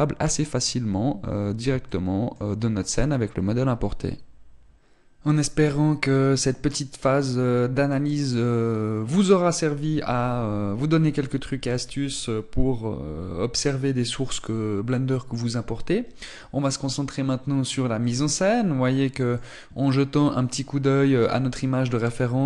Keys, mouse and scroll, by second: 0.2 click, 2.5 shift+middle click, 17.0-18.6 scroll down 2, 18.6 middle click.